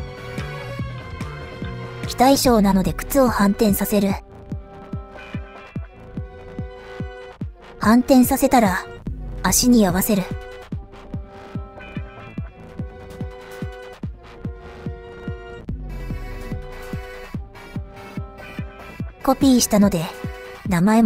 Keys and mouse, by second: 1.5 click, 8.6-9.6 drag, 10.4-11.6 drag, 12.2 click, 12.4-16.2 drag, 16.8 click, 17.2 middle click, 17.8 KP_7, 19.3 KP_1, 19.9 KP_3, 20.7 KP_1.